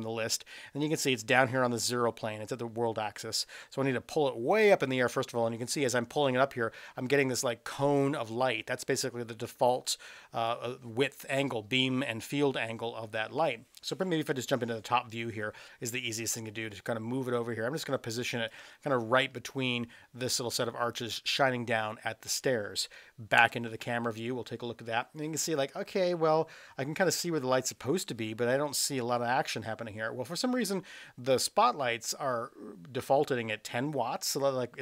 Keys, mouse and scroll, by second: 3.4-10.5 drag, 14.3 KP_7, 16.4-18.5 drag, 23.3 KP_0.